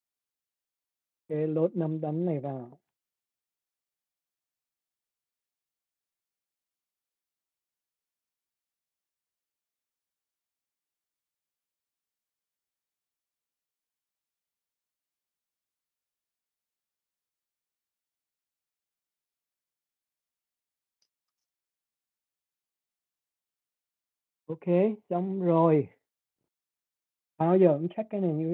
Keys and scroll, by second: 11.6 Return.